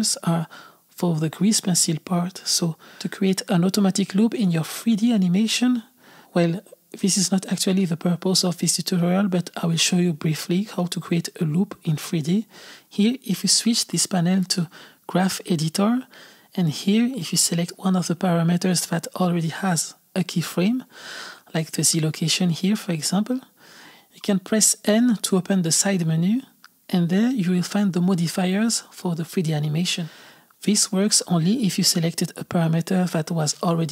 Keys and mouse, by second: 2.2 click, 4.7-11.8 drag, 13.8-19.0 drag, 22.2 click, 25.1 n, 27.6 click, 29.4-33.9 drag.